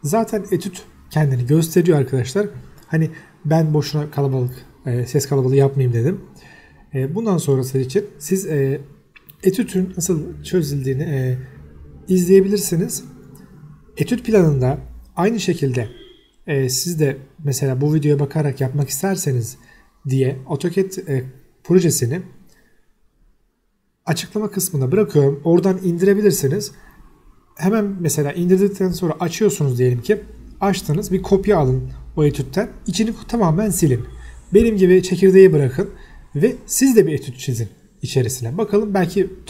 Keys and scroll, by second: 0.9 Escape, 16.3 Escape, 20.8 s, 20.9 space, 21.5 Escape, 21.7 t, 21.8 space, 28.7 Escape, 33.0 s, 36.5 Escape, 38.3-39.4 typing, 39.3 Escape.